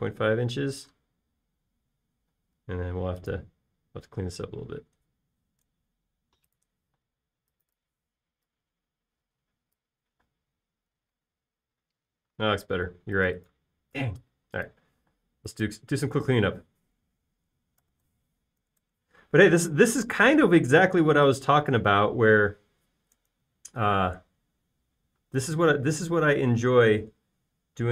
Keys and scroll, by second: 0.6 space, 1.6 l, 3.3 space, 3.7 l, 7.8 shift+p, 11.4 space, 16.0 m, 18.6-19.6 typing, 19.8 Return, 20.7 |.